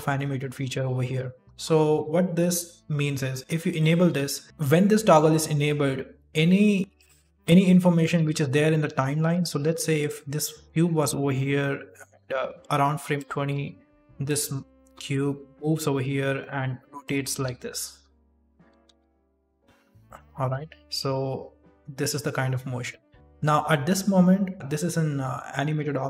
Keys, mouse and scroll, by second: 3.6 click, 6.8 click, 7.3 middle click, 8.1 KP_1, 8.8 g, 9.7 g, 10.1 r, 11.7 click, 13.4 g, 14.8 r, 17.2 r, 18.7 r, 21.0 click, 23.1 click, 23.1 middle click, 24.5 click, 24.5 right click, 24.5 shift+space, 24.7 middle click, 25.2 s.